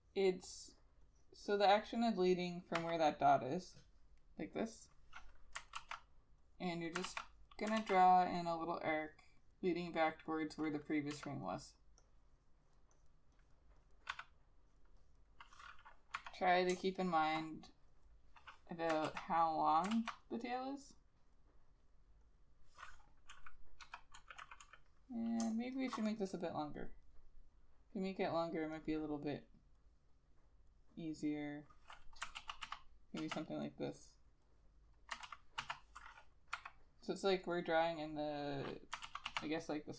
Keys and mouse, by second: 2.9 ], 5.9 ctrl+z, 7.2 ctrl+z, 7.9 ctrl+z, 8.7 double click, 12.8 e, 13.5 double click, 14.2 b, 15.1 double click, 16.3 ], 16.9 space, 19.2 ctrl+z, 20.1 ctrl+z, 23.4-25.5 typing, 31.2 double click, 32.5 ctrl+z, 32.8 ctrl+z, 33.3 ctrl+z, 33.8 double click, 35.4 ctrl+z, 35.7 ctrl+z, 36.7 ], 39.2 ctrl+z, 39.4 ctrl+z.